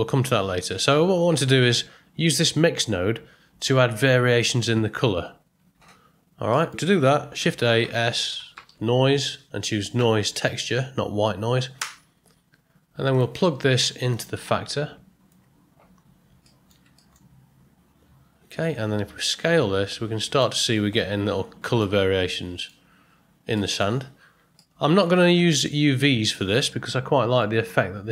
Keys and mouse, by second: 5.7 t, 6.1 middle click, 7.4 shift+a, 14.1-15.3 drag, 16.4 middle click, 17.0 ctrl+middle click, 19.1-20.4 drag, 21.8-22.6 middle drag, 23.5 ctrl+middle drag, 24.5-25.0 ctrl+middle drag, 26.7-27.4 middle drag.